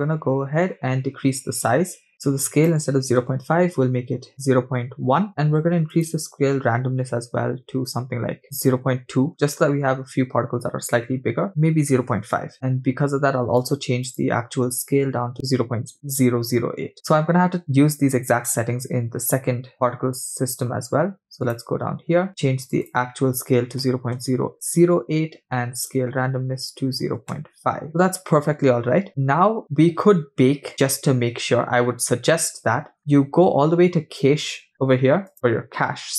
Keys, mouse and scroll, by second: 0.8-2.0 scroll up 6, 2.1-5.3 drag, 6.0-9.0 drag, 11.5-12.5 drag, 12.5-13.1 scroll up 1, 13.1-13.6 scroll up 1, 13.6-15.6 drag, 19.7-21.0 scroll up 8, 21.0-21.5 scroll up 1, 22.2 click, 22.3-22.6 scroll down 6, 22.6-25.4 drag, 25.8-27.9 drag, 33.0-33.9 scroll up 5, 35.3 click.